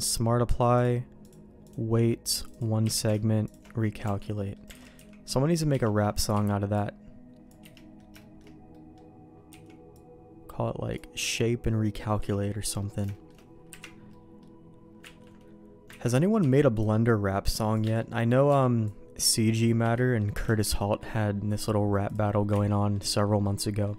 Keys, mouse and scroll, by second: 0.8 click, 1.3 click, 2.4 click, 2.8 q, 4.0 Tab, 4.3 middle click, 4.7 alt+a, 4.9 c, 5.8 middle click, 6.3 c, 7.7 middle click, 8.2 middle click, 8.7 middle click, 9.5 c, 12.8 middle click, 13.1 shift+middle click, 13.7 KP_Decimal, 14.1 middle click, 15.3 ctrl+q, 16.0 ctrl+x, 16.4 c, 18.0 middle click, 18.5 c, 19.9 middle click, 20.6 ctrl+q, 22.0 click, 22.6 ctrl+x, 22.7 middle click, 23.4 middle click.